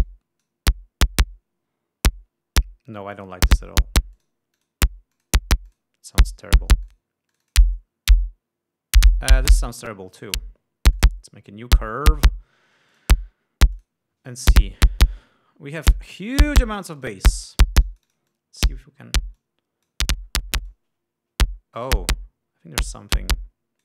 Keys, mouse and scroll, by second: 0.6-1.2 drag, 3.7 click, 4.8 click, 5.2 click, 5.7 click, 6.3 click, 7.4 click, 7.9 click, 10.8 click, 11.5 click, 12.6 click, 13.5 click, 14.3 click, 17.6 click, 18.4-19.4 drag, 19.4-19.8 scroll down 2, 20.0-20.6 drag, 20.8-21.2 scroll down 1, 21.3-23.8 drag.